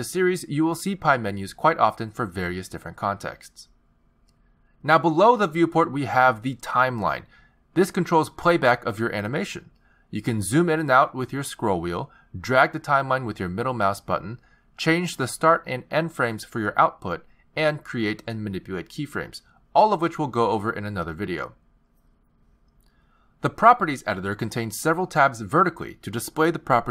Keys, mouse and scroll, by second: 0.9 z, 2.4 shift+s, 7.5 click, 8.6 click, 10.5 click, 11.7-12.3 scroll down 6, 12.3-12.9 scroll up 5, 12.9-13.3 scroll down 3, 13.3-14.4 scroll up 4, 14.4 middle click, 16.9 click, 19.0 click, 21.0 i, 22.9 click, 26.8 click.